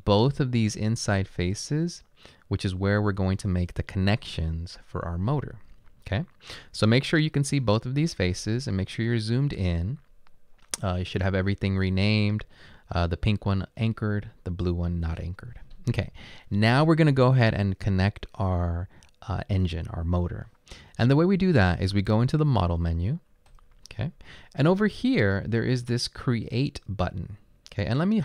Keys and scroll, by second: 1.2 typing.